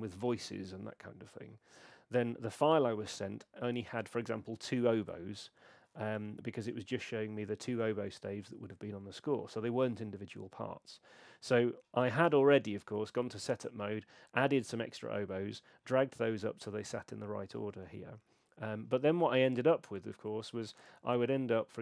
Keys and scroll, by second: 12.2 super+1, 17.7 super+2.